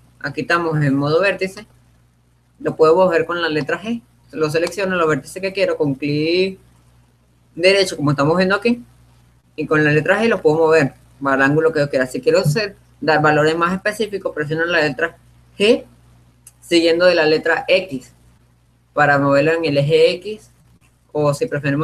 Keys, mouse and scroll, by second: 1.6-6.9 right drag, 10.2 g.